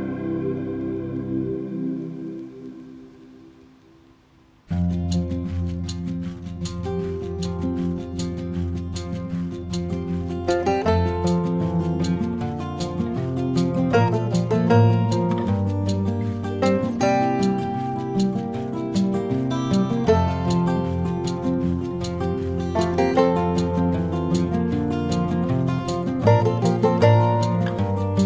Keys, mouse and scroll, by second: 1.4 KP_3, 4.4 right click, 6.0-6.6 ctrl+middle drag, 7.3 shift+c, 10.0 shift+a, 11.2 s, 13.0 s, 15.5 g, 18.4 s, 21.6 KP_1, 22.3 s, 26.2-26.7 middle drag, 26.9 Tab, 27.8 click.